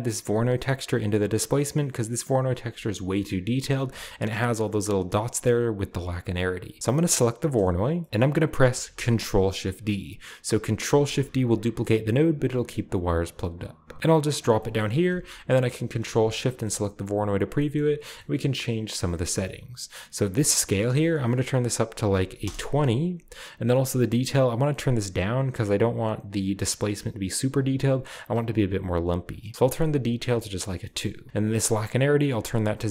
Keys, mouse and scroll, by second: 2.2 click, 4.1 scroll up 1, 5.7-6.1 scroll down 2, 6.9 click, 8.0 middle click, 10.8 ctrl+shift+d, 14.2 click, 14.7-15.8 scroll up 1, 15.8 ctrl+shift+click, 16.7-19.0 scroll up 3, 20.7 click, 22.1 typing, 22.4 Return, 29.6 click, 29.9-30.8 drag, 29.9 2, 30.8 middle click, 31.1-31.8 scroll up 1, 32.1-32.9 drag.